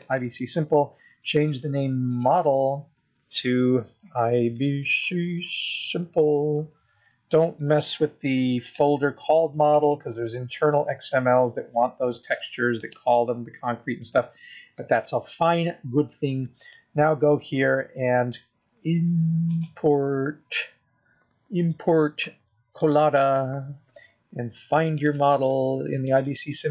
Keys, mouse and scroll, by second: 19.7 click.